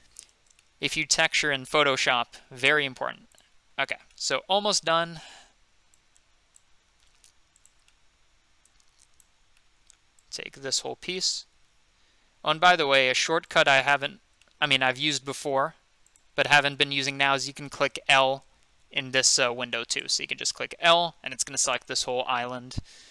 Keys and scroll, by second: 0.0-2.5 typing, 6.9 g, 11.5 g, 15.2 g, 18.7 |, 22.0 |.